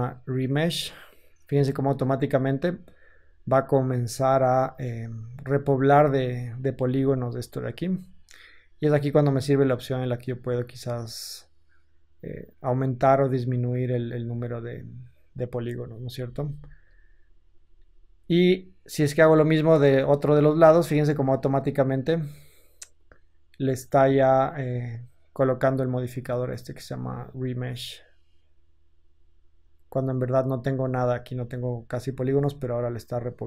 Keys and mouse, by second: 6.1 ctrl+z, 6.7 ctrl+z, 16.1 Tab, 16.7 Tab, 16.7-17.2 drag, 24.4-29.1 drag, 29.1 Tab, 30.7-33.4 ctrl+drag.